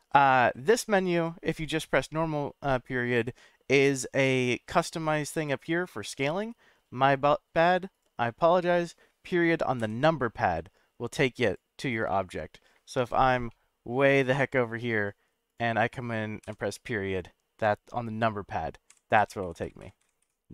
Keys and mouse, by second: 9.8 KP_Decimal, 12.1-12.4 middle drag, 13.5 shift+middle click, 15.5 click, 16.4 KP_Decimal, 17.7-18.5 middle drag.